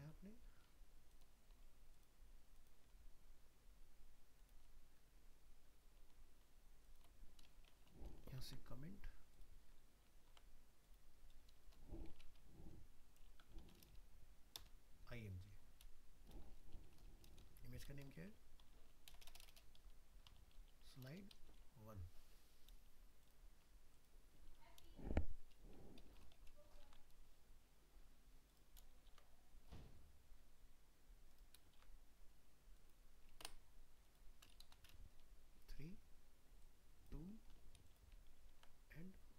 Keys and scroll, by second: 10.3 ctrl+s, 26.9 ctrl+c, 29.1 ctrl+v, 38.3 ctrl+s.